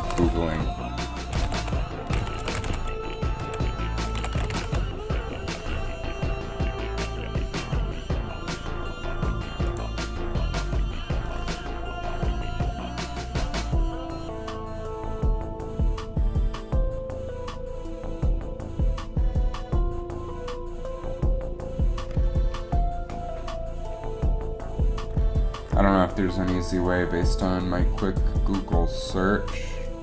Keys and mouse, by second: 26.4 alt+a.